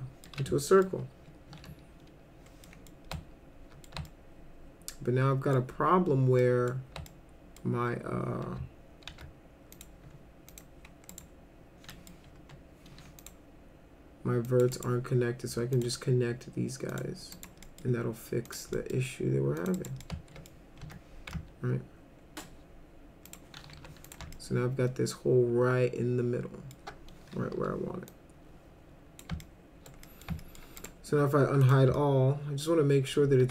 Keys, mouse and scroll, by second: 0.7 middle click, 1.5 1, 2.7 middle click, 3.1 alt+middle click, 4.1-5.5 alt+middle drag, 6.4 middle click, 7.1 alt+middle click, 9.1 alt+c, 9.7 click, 10.5 click, 11.1 right click, 11.9 middle click, 12.4 F3, 13.2 click, 14.5 click, 14.8 right click, 15.7 click, 16.9 click, 17.3 right click, 17.7 middle click, 18.5 click, 18.7 middle click, 19.6 click, 19.8 right click, 20.0 alt+middle click, 20.8 F3, 21.3-22.4 alt+middle drag, 23.3 click, 23.7 w, 24.1 click, 24.3-26.7 alt+middle drag, 27.5 r, 28.1-29.2 drag, 29.4 alt+middle click, 30.1 middle click, 30.4 alt+middle click, 30.8 right click, 31.6 click, 31.9-33.1 alt+middle drag.